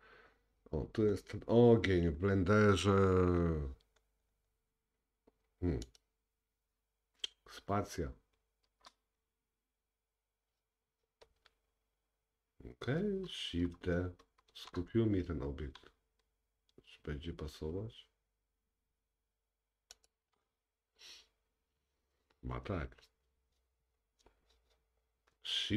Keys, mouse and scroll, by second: 1.3-1.6 scroll down 4, 2.6-3.9 scroll down 1, 4.0-4.9 scroll up 4, 4.9-5.7 scroll down 2, 8.7 space, 11.4 scroll down 2, 14.6 shift+d.